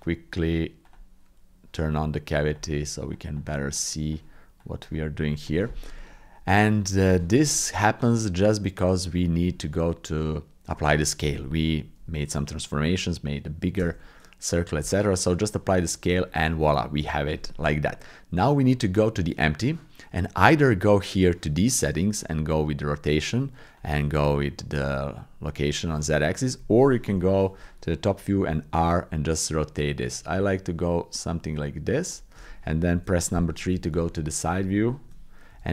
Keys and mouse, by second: 6.0 middle click, 7.1 shift+middle click, 7.5 middle click, 8.1 middle click, 9.1 click, 13.7 ctrl+a, 16.4 middle click, 16.7 click, 18.7 click, 22.4-23.8 drag, 24.3-25.7 drag, 27.1 KP_7, 28.3 r, 32.9 KP_3, 34.1 shift+click, 34.5 shift+click, 34.9 shift+click, 35.5 g.